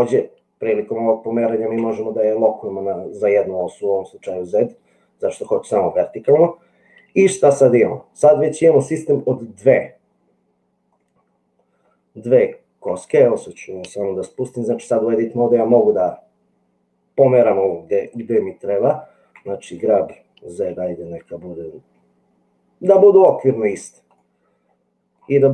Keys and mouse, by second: 11.1-12.8 middle drag, 19.4 g, 24.1-25.1 middle drag.